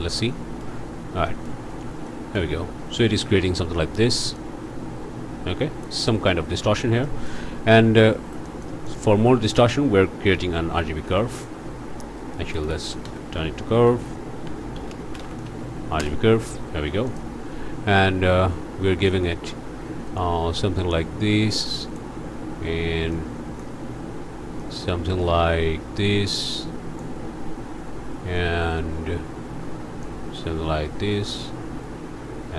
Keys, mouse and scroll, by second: 1.3 click, 2.1 click, 2.6 scroll up 1, 4.3-6.0 drag, 7.0 click, 8.4 click, 9.2 shift+a, 10.3 r, 10.5 g, 10.7 b, 12.4-15.2 typing, 16.0 Return, 17.1 click, 19.1-22.1 drag, 23.1 click, 24.6-27.2 drag, 30.0-31.6 drag.